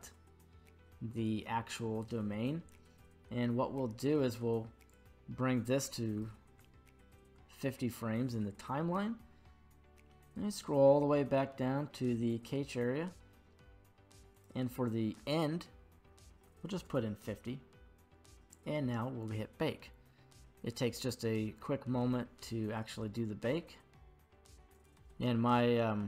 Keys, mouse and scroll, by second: 4.9-7.3 drag, 9.5-10.2 scroll down 1, 10.2-10.9 scroll down 7, 10.9-14.3 scroll down 2, 14.3-16.9 drag, 14.3-16.3 scroll down 6, 19.2 click, 24.8 click.